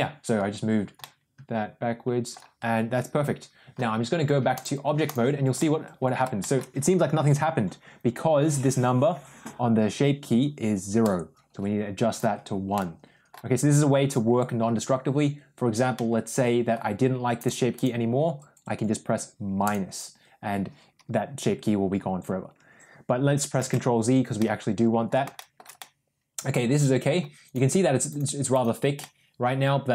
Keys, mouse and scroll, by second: 0.9-2.3 middle drag, 4.5 click, 5.4 middle click, 6.3 shift+middle drag, 11.0-12.2 drag, 12.6-13.2 middle drag, 15.8 middle click, 17.7 click, 19.6 drag, 23.7 ctrl+z, 24.3-24.9 middle drag, 25.2 shift+middle drag, 25.6-27.0 middle drag, 28.0 click, 28.4 click, 28.9-29.9 middle drag.